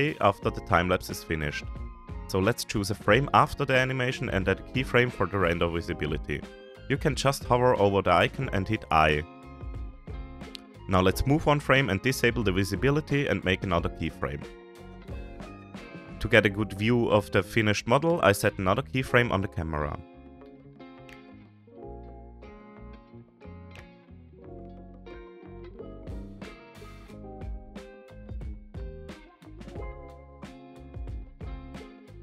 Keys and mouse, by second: 10.0 click, 11.3-12.3 drag, 13.9 click, 16.0-20.8 drag, 24.6-27.1 middle drag, 27.9-28.6 shift+middle drag, 29.4 shift+middle click.